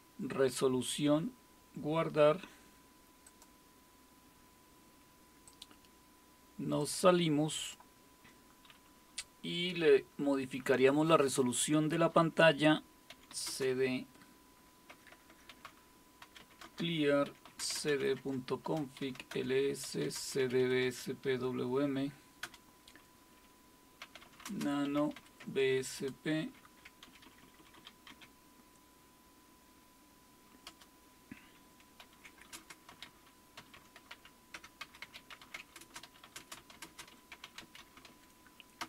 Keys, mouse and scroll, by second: 0.0-0.3 typing, 3.2-13.1 drag, 12.8-13.8 typing, 14.9-21.1 typing, 22.4 typing, 23.8-25.9 typing, 27.0-28.6 typing, 30.7 typing, 32.0-38.8 typing.